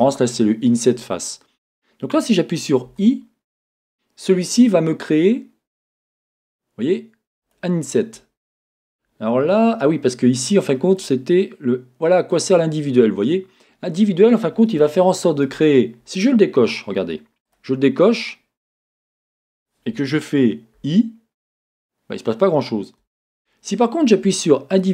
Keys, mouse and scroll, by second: 7.4 click, 10.9 click, 12.3 click, 13.3 middle click, 14.8 scroll, 17.5 click, 23.1 Escape, 24.7 click.